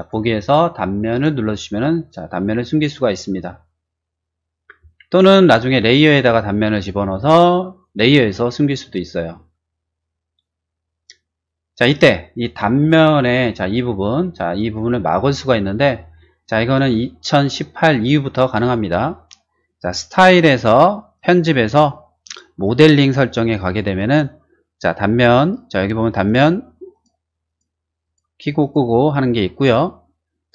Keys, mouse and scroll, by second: 1.1 click, 10.8 middle click, 12.2-16.7 middle drag, 14.8 scroll down 1, 19.9 click, 21.1 click, 22.2 click, 26.2 click, 26.9 click, 27.4 click, 28.0 click, 28.6 click.